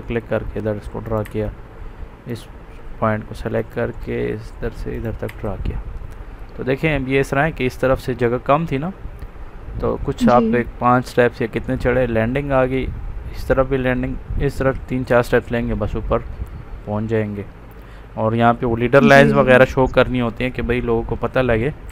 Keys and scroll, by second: 1.1 Escape, 5.2 Escape.